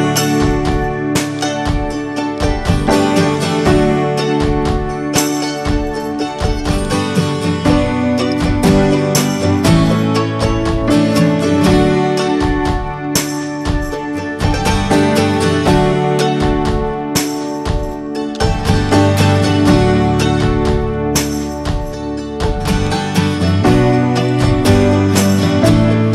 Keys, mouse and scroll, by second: 0.3 click, 0.6 h, 1.3 click, 1.7-2.0 scroll up 2, 2.0-3.7 middle drag, 3.7 click, 4.1 scroll down 3, 5.0-7.0 shift+middle drag, 7.0 scroll up 1, 7.2-9.8 middle drag, 9.8-13.9 drag, 14.1 click, 14.4-16.2 middle drag, 16.2 ctrl+s, 16.3-18.1 shift+middle drag, 18.1 ctrl+s, 18.2-21.7 middle drag, 21.7 click, 24.6-26.1 drag.